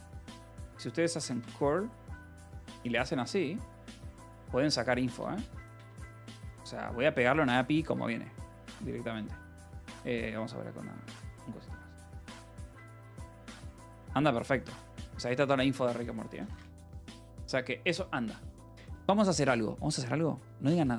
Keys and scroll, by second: 0.0-1.7 typing, 2.6 ctrl+e, 2.9 BackSpace, 6.5 ctrl+b, 7.9 ctrl+v, 9.0 Left, 11.9 space, 12.6 Return, 15.8-17.5 typing, 19.3 ctrl+6, 20.2-20.9 typing.